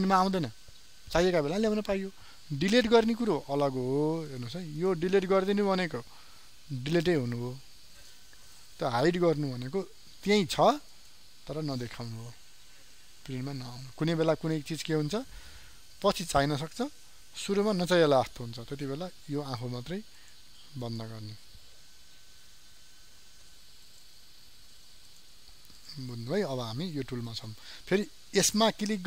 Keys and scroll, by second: 9.5 ctrl+z.